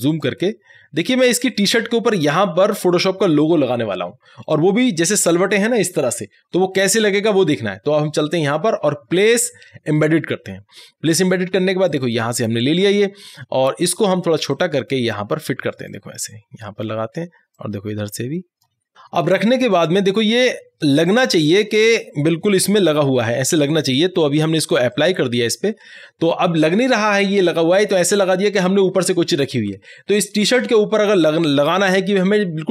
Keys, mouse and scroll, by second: 0.3 click, 0.5 space, 8.5 space, 8.5-22.9 drag, 22.9 Right, 25.0 click.